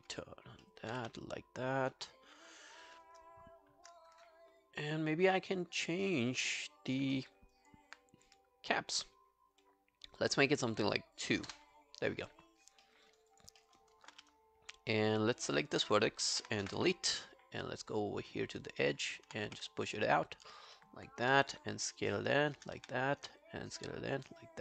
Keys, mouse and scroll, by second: 0.0 alt+b, 0.7 alt+middle click, 1.0 alt+q, 1.3 right click, 7.2 alt+middle click, 7.6 alt+click, 8.7 middle click, 11.5 Return, 11.5 2, 12.8 alt+middle click, 13.1 alt+right click, 13.3 alt+click, 13.6 alt+middle click, 13.8 alt+right click, 14.1 w, 16.4 ctrl+F11, 16.7 Delete, 17.8 right click, 18.9 double click, 19.5 w, 20.8 alt+middle click, 21.3 r, 22.0 shift+click, 22.8 w, 23.4 shift+click, 24.4 scroll down 1.